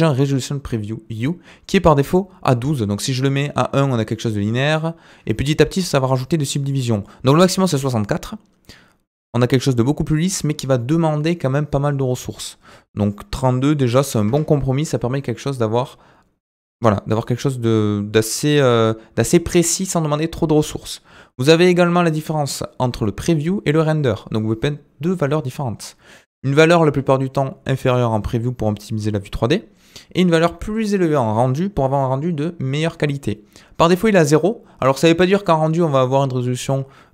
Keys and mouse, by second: 2.6-6.7 drag, 7.0-8.0 drag, 10.8-11.9 middle drag, 13.1-21.2 drag.